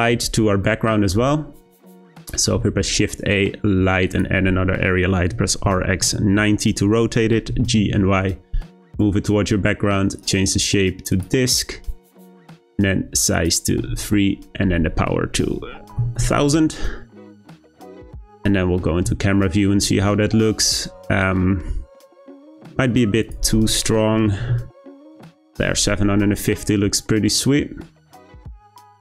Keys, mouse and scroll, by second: 0.5 scroll down 1, 0.6 middle click, 1.3-2.1 scroll down 5, 2.1 shift+middle click, 2.5 shift+a, 5.3 r, 7.5 g, 10.2-13.2 drag, 13.3-16.1 drag, 16.1 0, 21.9-23.2 scroll up 1, 23.2-26.2 drag, 27.2-27.7 scroll down 1, 27.7-28.9 scroll up 1, 28.9-29.0 scroll up 1.